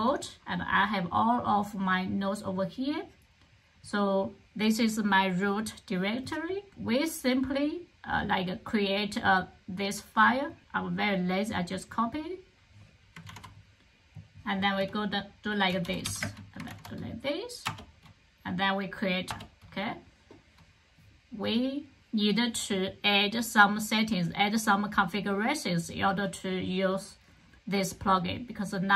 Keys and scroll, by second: 13.2 super+c, 15.3-16.4 typing, 16.6 super+v, 17.5 Return.